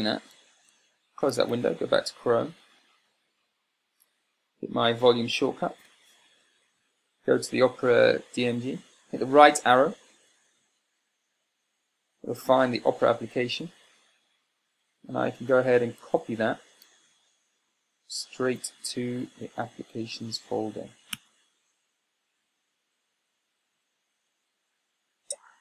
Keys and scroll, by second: 1.2 super+w, 1.8 super+Tab, 15.0 Tab, 16.4 c, 18.8 Tab, 21.5 a, 23.9 Return.